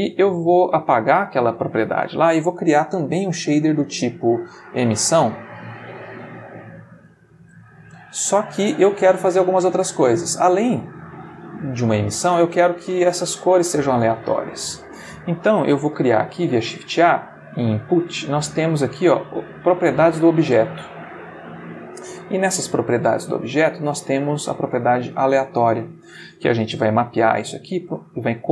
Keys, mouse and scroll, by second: 0.3 middle click, 1.1-1.6 drag, 2.1 shift+a, 4.9 click, 5.6 click, 6.4-7.2 drag, 7.9-8.7 shift+middle drag, 8.9-10.4 ctrl+shift+middle drag, 12.3 shift+middle click, 14.6 middle click, 15.9 shift+a, 20.4 click, 21.5 click, 24.0-25.9 drag, 26.6 shift+a.